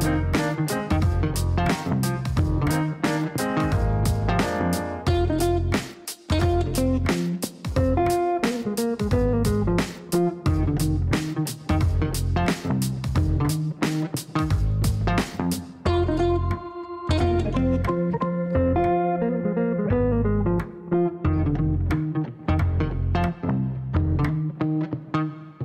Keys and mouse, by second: 0.7 click, 1.6 click, 4.6 click, 7.5 click, 8.6 click, 9.6 click, 10.4 click, 11.2 click, 11.8 right click, 16.2 click, 17.0 click, 17.7 click, 18.4 click, 20.0 click, 21.0-22.8 typing, 22.9 Down.